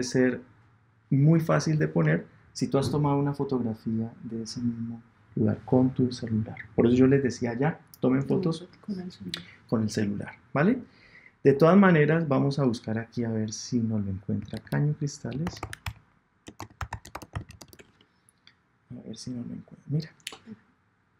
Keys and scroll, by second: 17.7 Return.